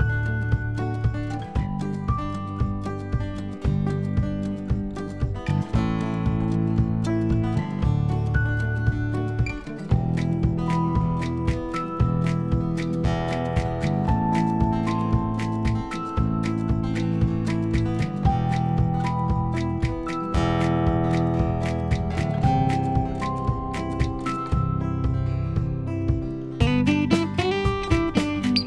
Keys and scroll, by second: 15.5 x, 17.3 x.